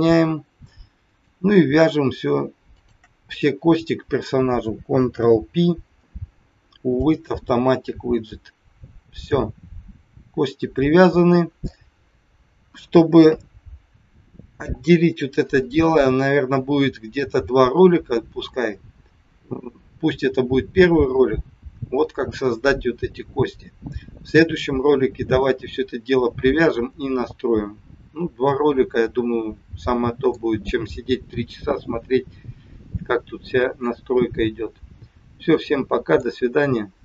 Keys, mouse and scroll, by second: 1.0 click, 2.7 shift+click, 5.0 ctrl+p, 9.3 middle click, 12.6 KP_1, 13.2 KP_3, 15.6 middle click, 18.4 scroll down 1, 28.5 middle click, 33.8 middle click.